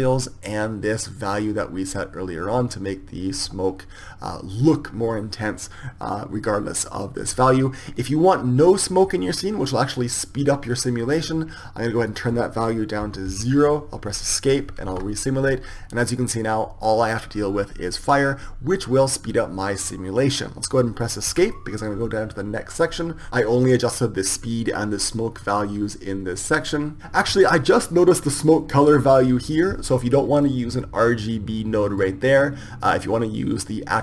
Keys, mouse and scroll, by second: 12.0-14.0 drag, 14.0 Escape, 14.9 alt+a, 21.4 Escape, 31.5-34.0 drag.